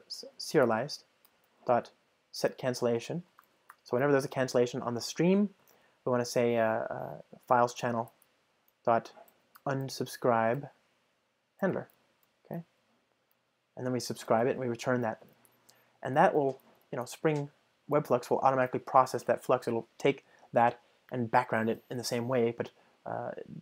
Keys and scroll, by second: 9.1 Return, 16.4 super+BackSpace, 18.0 ctrl+alt+shift+Right.